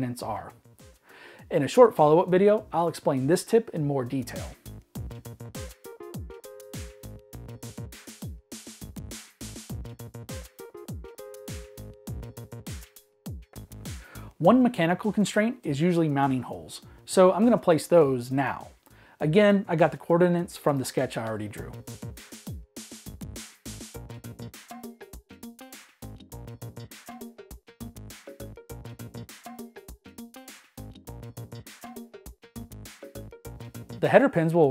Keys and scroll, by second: 0.0-0.8 typing, 3.1-6.8 typing, 10.6-13.3 typing, 15.4-20.6 typing, 17.9 Escape, 22.2-25.4 typing, 28.2-28.9 typing.